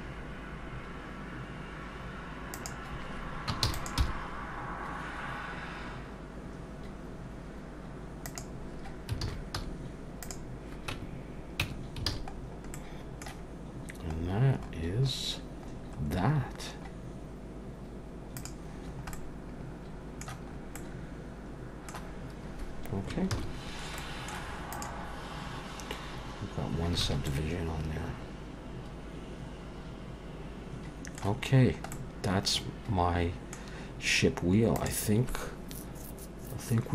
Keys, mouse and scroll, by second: 3.6 shift+d, 4.0 r, 9.2 alt+a, 9.6 z, 10.9 Tab, 11.6 Tab, 12.1 alt+a, 12.3-12.7 scroll down 4, 12.7 middle click, 14.2-15.0 scroll down 2, 14.6-15.8 scroll up 7, 15.8-17.3 scroll down 6, 17.3-17.6 scroll down 1, 18.4 click, 18.8-19.6 scroll down 2, 19.1 middle click, 20.5-21.1 scroll up 2, 20.8 middle click, 23.4 ctrl+s, 23.6-24.0 scroll down 2, 24.0 middle click, 24.7 click, 26.6 scroll up 1, 27.1 alt+a, 27.3 middle click, 31.6-31.9 scroll down 1, 31.9 middle click.